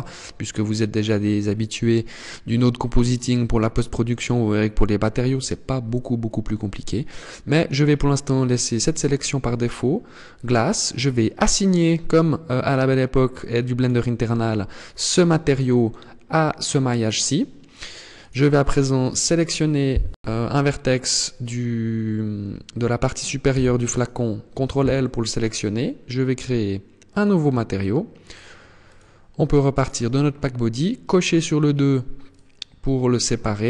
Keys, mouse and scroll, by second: 13.0 click, 17.7 right click, 23.0 ctrl+l, 26.7 click, 27.7 click, 28.3 click, 30.5 click, 31.8 click.